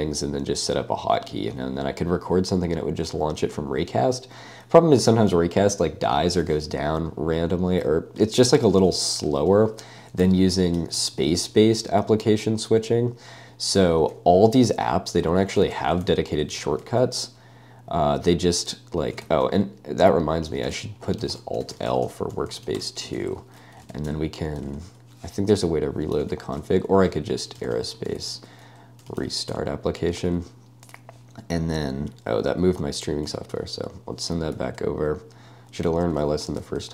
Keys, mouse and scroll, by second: 10.2 typing, 10.8 ctrl+d, 11.0 ctrl+d, 11.2 ctrl+d, 11.3 ctrl+d, 11.7 ctrl+u, 12.1 ctrl+d, 12.1 ctrl+u, 13.3 ctrl+d, 13.4 ctrl+u, 13.9-23.6 typing, 23.9 super+space, 24.7 super+space, 27.3-30.0 typing, 33.3 ø, 34.6 â, 36.5 å.